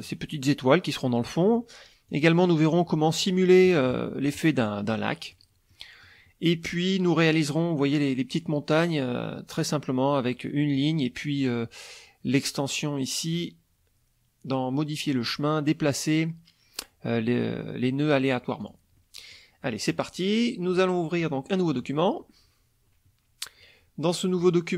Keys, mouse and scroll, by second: 0.0 click, 1.2 middle click, 2.1 click, 3.7 KP_Subtract, 4.9 middle click, 5.7 click, 6.5 middle click, 6.9 click, 7.2 middle click, 10.7 click, 11.4 click, 13.4 click, 18.6 click, 19.0 click, 19.7 click, 20.7 click, 20.9 scroll up 1, 21.2 click, 21.6-22.1 scroll up 1, 24.4 click.